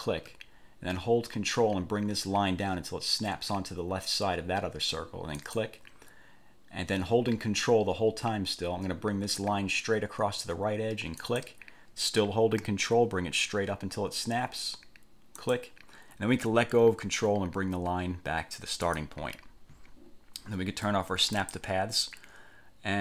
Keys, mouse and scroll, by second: 5.6 ctrl+click, 11.4 ctrl+click, 15.6 ctrl+click, 19.1 click, 21.5 click.